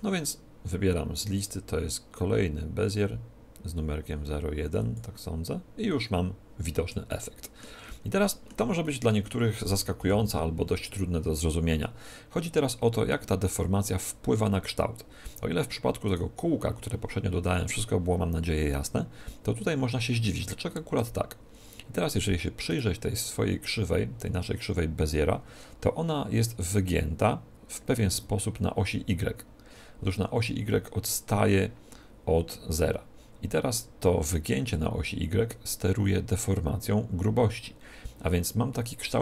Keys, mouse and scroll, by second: 1.3-3.2 drag, 7.0-10.6 middle drag, 9.9 KP_7, 16.0-17.8 right drag, 22.6-24.6 right drag.